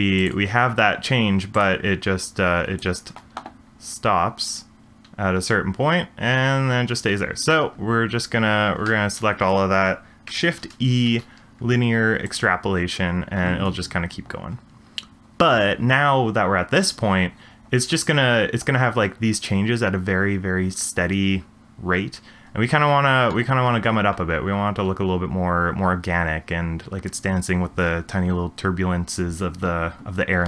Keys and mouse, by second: 0.2 click, 1.5 click, 2.2-2.9 drag, 2.9 space, 7.1 space, 8.8 a, 10.6 shift+e, 13.4 space.